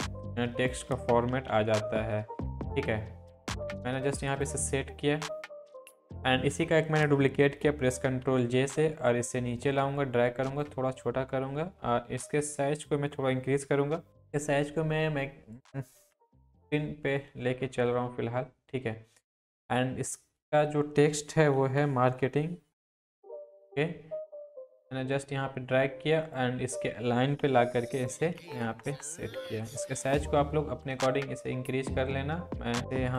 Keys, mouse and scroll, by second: 1.3 ctrl+t, 2.1-3.4 drag, 8.0 ctrl+j, 8.7-15.0 drag, 15.0-15.7 drag, 21.3-23.5 typing, 23.3-27.4 drag, 27.4 Up, 30.0 ctrl+t, 31.1-33.1 drag.